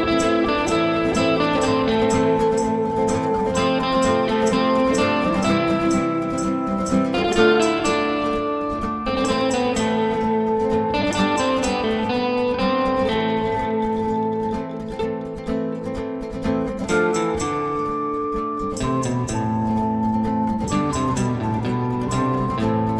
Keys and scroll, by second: 0.2 b, 6.3 ctrl+z, 17.1-18.1 typing.